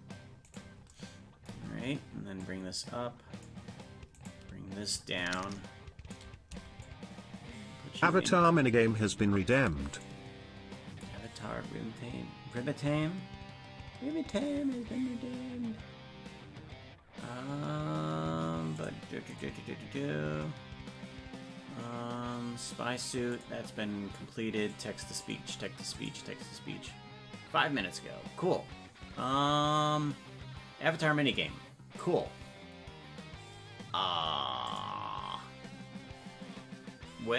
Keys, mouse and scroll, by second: 0.5 right click, 2.4-3.4 drag, 4.2 right click, 5.3 click, 6.8-9.5 shift+drag, 10.0-11.0 drag.